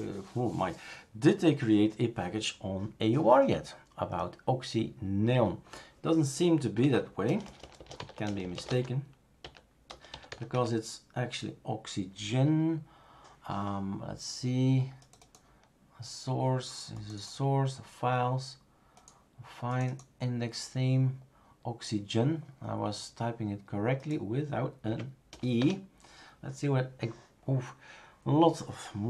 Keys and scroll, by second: 6.8 Up, 7.2-10.8 typing, 24.9 Up, 25.3 BackSpace, 25.6 Return.